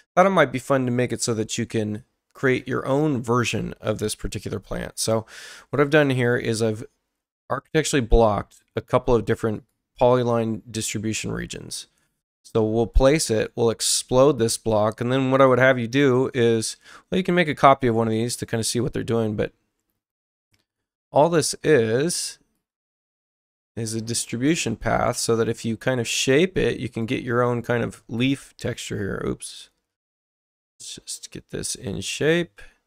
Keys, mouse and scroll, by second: 2.4 click, 5.9 click, 9.5 right click, 12.8 click, 14.6 click, 15.3 right click, 16.7 ctrl+alt+c, 17.6 click, 20.7 click, 21.7 right click, 22.5 click, 24.4 click, 26.1 click, 27.0 click, 28.8 ctrl+z, 29.5 right click, 30.3 click, 31.9 click.